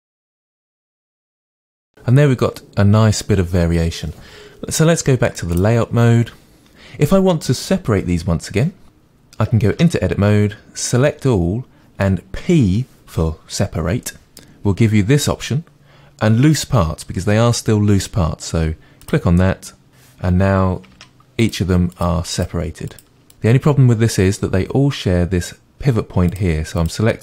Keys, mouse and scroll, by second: 0.0 drag, 0.1 middle click, 0.5 drag, 0.7 middle drag, 1.0 click, 1.2 drag, 1.5-5.6 middle drag, 5.6-9.8 drag, 9.8 Tab, 11.0 a, 21.0 Tab, 21.4 click.